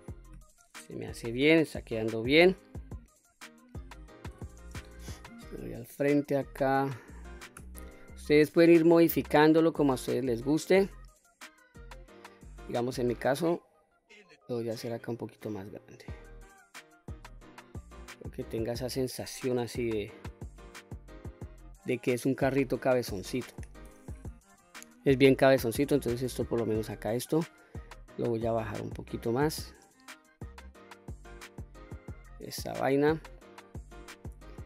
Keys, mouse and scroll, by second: 3.0-3.3 scroll down 2, 3.4 middle click, 4.3 KP_1, 5.8 1, 7.6 q, 8.1 click, 9.6 s, 12.1 click, 13.2-15.1 drag, 15.6-15.9 scroll down 2, 15.9 middle click, 17.2 q, 17.8-19.2 middle drag, 21.5 middle click, 23.5 KP_3, 24.5 q, 26.0-27.2 drag, 28.4-30.7 drag, 31.0-31.5 scroll up 1, 31.5-32.5 middle drag, 33.0 middle click, 33.9 q, 34.4 middle click.